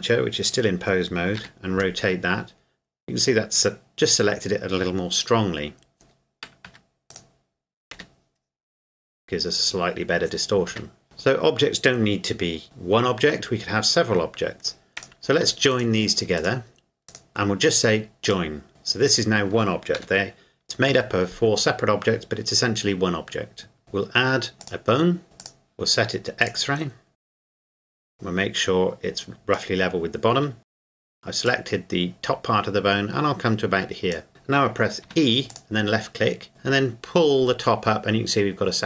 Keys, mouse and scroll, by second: 1.4 r, 6.6 Escape, 7.2 right click, 7.9 r, 10.7 Escape, 11.0 shift+middle click, 15.0 right click, 15.7 shift+right click, 18.2 click, 19.1 right click, 20.0 g, 20.9 Escape, 23.8 shift+a, 24.6 click, 25.4 click, 30.6 Tab, 30.9 right click, 31.5 click, 35.0 e, 35.5 click.